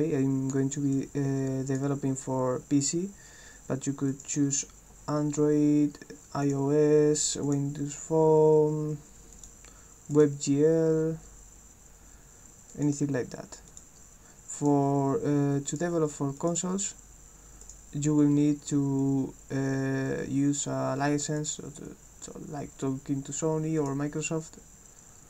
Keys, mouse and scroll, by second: 0.9 click, 4.1 click, 5.1 scroll down 2, 6.0 scroll up 2, 6.5 click, 7.5 click, 8.3 scroll down 2, 9.3 click, 10.1 click, 12.7 click, 14.6 click, 15.7 click, 16.4 click, 17.6 click, 21.4 click, 23.8 click, 24.9 scroll up 2.